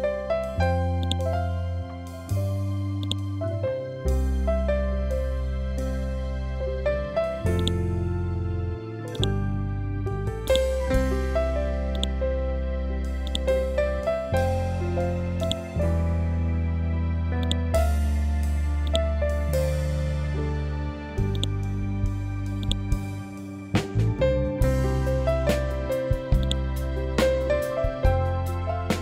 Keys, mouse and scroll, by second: 5.4 Right, 7.5-15.3 drag, 15.9-16.6 scroll down 1, 17.4 click, 19.4-20.1 scroll up 1, 21.5 click, 23.1-23.8 scroll down 1, 26.3 click, 27.7-28.4 scroll up 1.